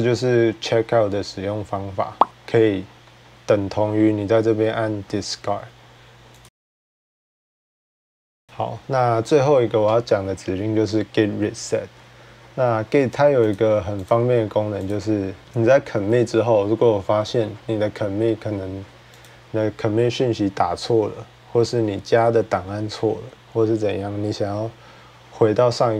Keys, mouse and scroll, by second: 6.2 click, 8.5-12.2 drag, 13.3 click, 13.9 click, 14.7 click, 15.4 click, 19.0 click.